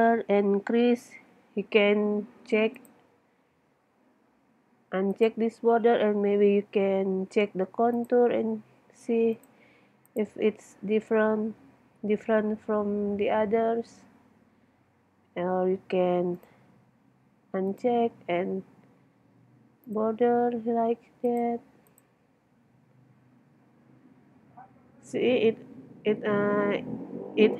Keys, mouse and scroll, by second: 2.8-4.7 middle drag, 5.1-7.2 middle drag, 8.0-9.3 middle drag.